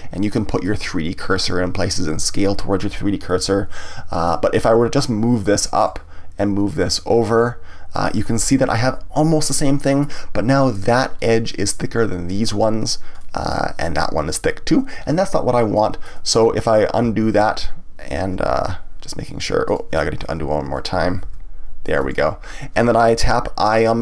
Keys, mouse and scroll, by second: 0.6-4.9 middle drag, 4.9-8.2 drag, 8.2-11.2 middle drag, 13.2-16.5 middle drag, 16.5 ctrl+z, 18.5 g, 19.7 click, 20.0 ctrl+z, 21.2 g, 22.1 right click.